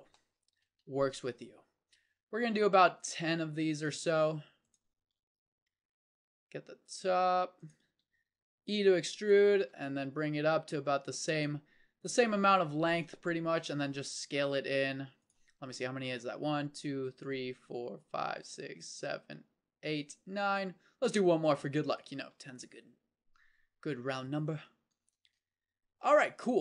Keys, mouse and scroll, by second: 0.1 click, 0.8 s, 4.1 e, 5.0 s, 7.9 e, 9.7 s, 13.9 s, 20.9 e, 22.3 s, 25.1 Tab.